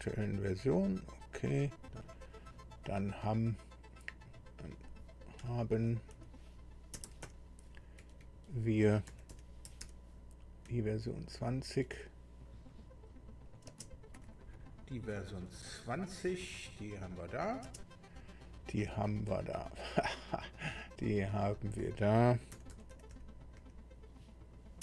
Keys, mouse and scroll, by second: 1.3 click, 2.0 click, 4.2 click, 5.4 Right, 6.1 Delete, 6.9 b, 7.2 e, 7.8 n, 8.0 Right, 8.9 Right, 9.1 Delete, 9.6 Delete, 9.8 i, 10.4 r, 10.6 Right, 11.2 Right, 11.3 Right, 13.4 click, 13.7 space, 19.3 click, 21.0 click, 22.5 Delete, 22.9 Delete, 23.1 Delete, 23.6 Delete, 24.2 Delete, 24.6-24.8 typing.